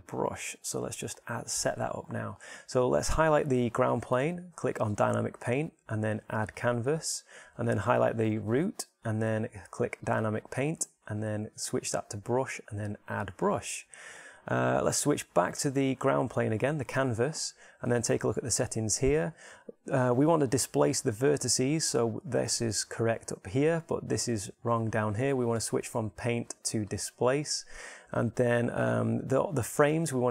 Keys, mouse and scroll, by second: 5.6-15.6 drag, 16.3-17.5 right drag, 17.5-30.3 drag.